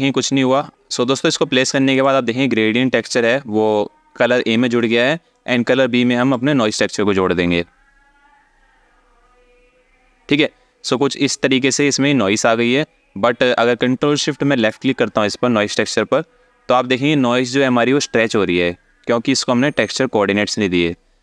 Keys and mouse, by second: 1.6 click, 5.0 click, 5.3 click, 14.3 ctrl+shift+drag.